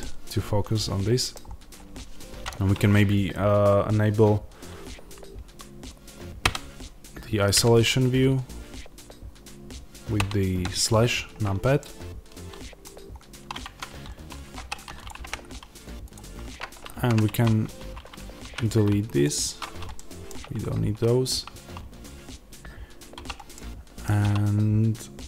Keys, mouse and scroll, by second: 1.3 scroll down 1, 6.3 KP_Divide, 12.7 scroll down 1, 13.5 Tab, 14.5 3, 14.9 click, 15.1 x, 16.8 ctrl+z, 17.2 1, 19.1 x, 19.8-25.2 middle drag, 23.1 3, 24.1 3.